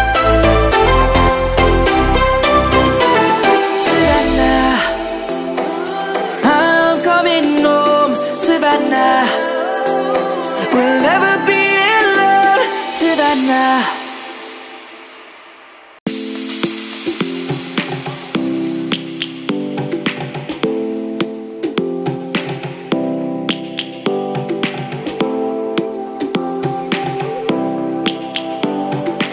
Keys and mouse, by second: 0.0 e, 0.9 middle click, 1.8 ctrl+z, 2.4 ctrl+z, 6.8 click, 7.6 e, 9.1 click, 9.5 middle click, 9.9 Tab, 11.5 right click, 12.0 Tab, 25.2 ctrl+7, 27.2 click, 28.0 ctrl+z.